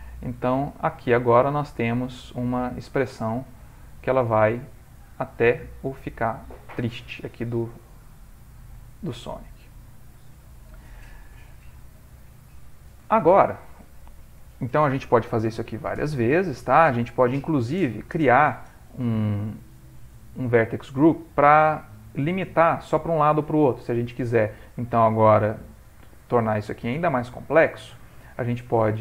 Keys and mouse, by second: 1.4 click, 4.8 click, 4.8 middle click, 5.8 ctrl+middle click, 7.6 middle click, 9.1 middle click, 10.8 ctrl+middle click, 11.0 ctrl+middle click, 12.3 click, 13.1 ctrl+middle click, 13.9 shift+middle click, 27.7 ctrl+middle click.